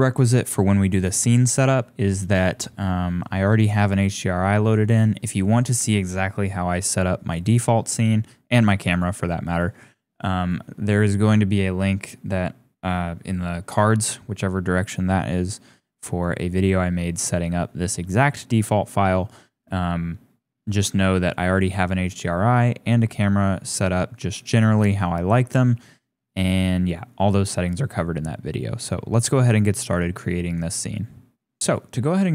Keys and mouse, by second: 10.5 click, 21.3-21.7 drag, 22.1 click, 31.7 click.